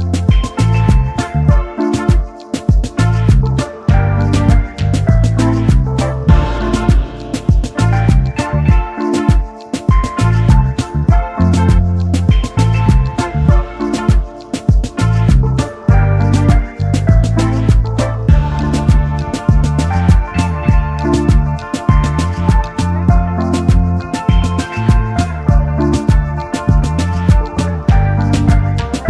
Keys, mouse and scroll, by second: 0.4-0.7 alt+scroll down 1, 1.1 scroll up 1, 2.9 double click, 6.5 shift+click, 10.4 Up, 10.5 Up, 10.8 Up, 10.9 Up, 11.2 Up, 11.4 Up, 11.7 Up, 14.1 alt+shift+click, 17.3-17.7 alt+scroll down 1, 18.1 space, 18.7 space, 18.8 double click, 19.1 space, 22.6 right click, 23.8 double click, 27.6 double click.